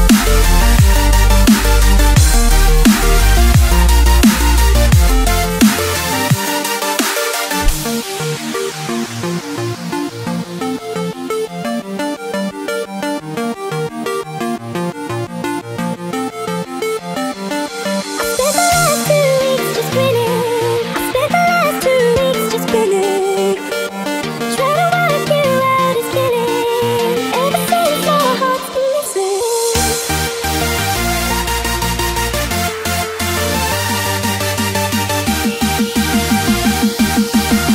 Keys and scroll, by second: 4.4 space, 13.2 space, 13.7 super+space, 13.8 super+space, 13.9 super+space, 14.0 super+space, 14.2 super+space, 14.4-18.7 typing, 16.0 alt+super+space, 16.1 alt+super+space, 16.2 alt+super+space, 16.2 alt+super+space, 17.4-19.1 alt+super+space, 18.9 super+space, 20.0 alt+super+space, 20.5 super+space, 20.5 super+space, 20.6 super+space, 20.7 super+space, 21.0-21.8 typing, 21.8 super+space, 22.7 alt+super+space, 23.6 super+space, 23.7-24.4 typing, 25.7 space, 26.2 super+space, 26.3 super+space, 27.7 space, 28.2 alt+super+space, 28.3 alt+super+space, 28.4 alt+super+space, 28.4 alt+super+space, 28.8 alt+super+space, 28.9 alt+super+space, 29.7 alt+super+space, 30.2 alt+super+space, 31.4 alt+super+space, 31.6 alt+super+space.